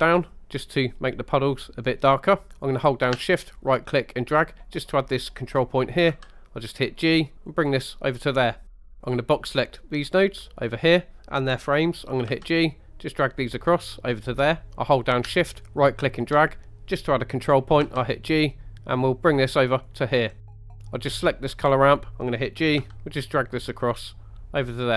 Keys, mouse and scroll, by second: 3.6 shift+right click, 6.1 g, 7.5 click, 8.5 scroll down 1, 8.7 middle click, 9.2-10.4 drag, 12.3 g, 14.4 click, 15.3 shift+right click, 17.8 g, 19.8 click, 20.4 scroll down 2, 20.6 middle click, 21.0 click, 21.7 scroll up 2, 22.8 g.